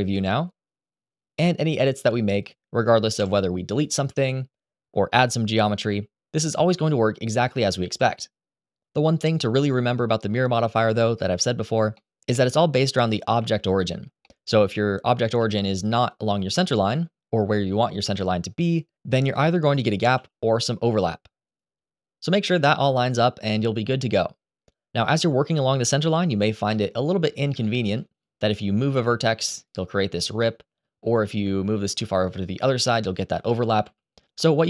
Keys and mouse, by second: 1.1 middle click, 2.1 click, 2.9 Delete, 3.9 ctrl+z, 4.9 r, 4.9 3, 5.1 click, 6.5 e, 7.3 click, 8.4 ctrl+z, 11.7 middle click, 12.3 middle click, 13.1 a, 14.0 middle click, 15.1 g, 15.8 click, 20.4 g, 22.8 ctrl+z, 23.3 ctrl+z, 25.9 1, 27.3 shift+middle click, 27.9 click, 28.6 g, 29.3 click, 30.7 g, 32.2 click, 33.7 ctrl+z, 34.1 ctrl+z.